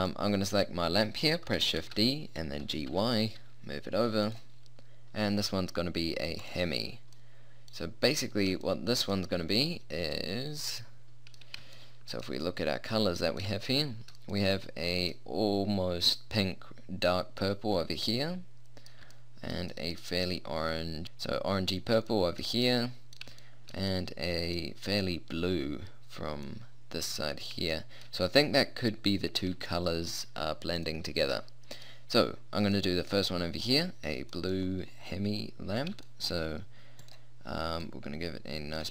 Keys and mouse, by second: 2.0 shift+d, 6.6 click, 7.2-8.8 middle drag, 9.0 middle click, 10.2 middle click, 18.4 middle click, 19.2 middle click, 22.4 middle click, 23.8 middle click, 26.8 middle click, 27.0 middle click, 27.9 middle click, 28.4 middle click, 29.3 middle click, 36.4-37.8 middle drag, 37.8 middle click, 38.8 click.